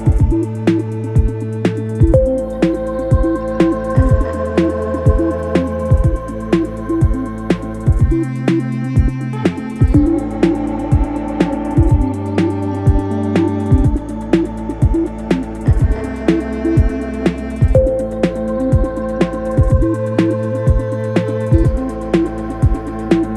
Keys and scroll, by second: 1.3 ], 1.8 4, 3.8 2, 11.8 ], 16.8 f, 17.3 ctrl+z, 19.2 d, 19.6 f.